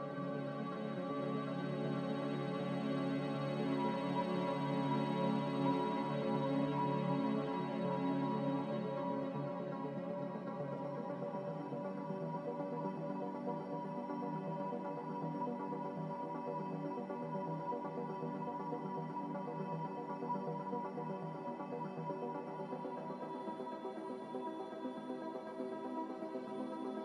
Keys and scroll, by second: 4.2-6.7 typing, 10.6-11.7 typing, 17.8 z.